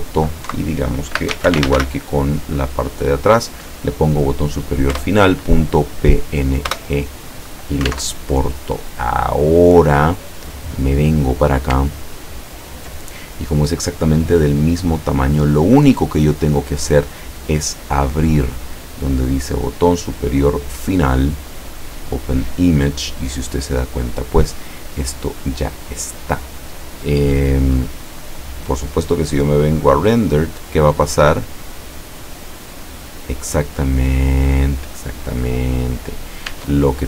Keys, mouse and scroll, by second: 0.5 Right, 1.1-2.3 typing, 4.9 Return, 6.7 Return, 8.1 alt+Tab, 9.7-10.1 scroll down 2, 11.3 scroll down 2, 12.2-12.7 ctrl+scroll down 4, 18.0 click, 19.3 click, 20.5 click, 21.9 click, 25.5 click, 29.7 click, 30.8 click, 36.6 Tab.